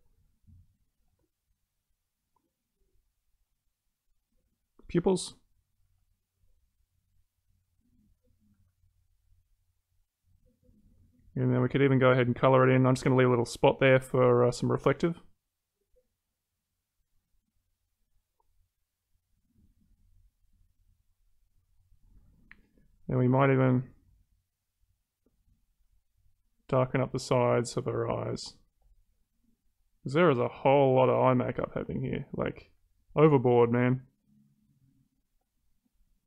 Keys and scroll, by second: 9.0 ctrl+z.